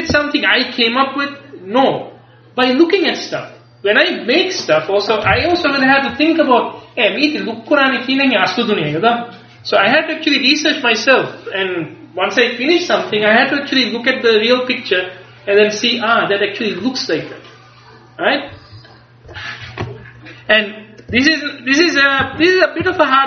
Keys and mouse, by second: 20.5 click, 21.2 Tab, 22.3 a, 22.9 a.